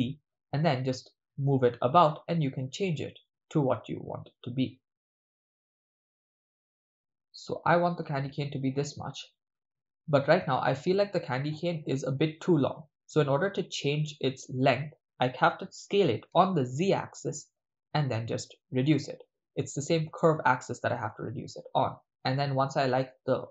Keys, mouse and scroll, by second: 9.6 click, 15.8 s, 17.9 z.